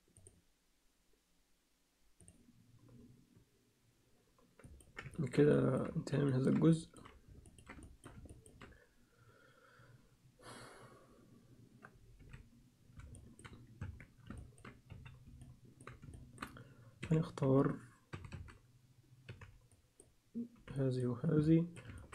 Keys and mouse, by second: 4.6 ctrl+click, 5.1 ctrl+alt+click, 5.5 alt+shift+click, 5.7 alt+shift+middle click, 6.3 ctrl+middle click, 6.7 alt+shift+middle click, 7.5 ctrl+alt+middle click, 7.8 alt+shift+middle click, 8.3 ctrl+alt+middle click, 12.2 z, 13.1 alt+shift+middle click, 13.8 Tab, 14.4 ctrl+alt+middle click, 14.9 z, 15.4 alt+click, 16.1 alt+shift+click, 17.0-19.3 typing, 20.6 b, 21.4 alt+middle click, 22.0 ctrl+middle click.